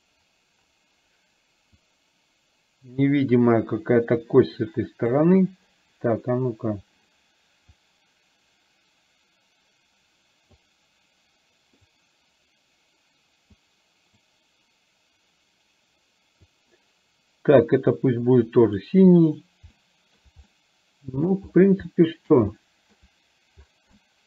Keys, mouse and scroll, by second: 1.9-5.2 drag, 7.8-10.5 drag, 11.9-13.5 drag, 14.3-16.7 drag, 19.9-20.3 shift+middle drag, 20.5-21.4 middle drag, 21.9-22.4 middle drag, 22.5-23.0 shift+middle drag, 24.0-24.2 shift+middle drag.